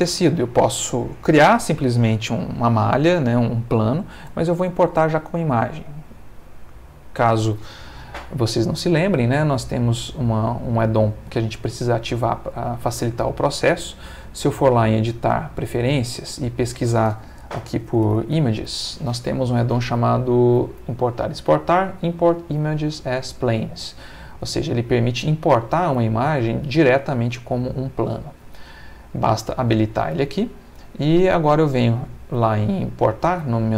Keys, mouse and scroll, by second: 0.3 shift+middle click, 6.0 click, 15.6 click, 16.6 click, 17.8-18.7 typing, 24.4 click, 24.8 click, 26.6 click, 30.2 click, 31.2 click.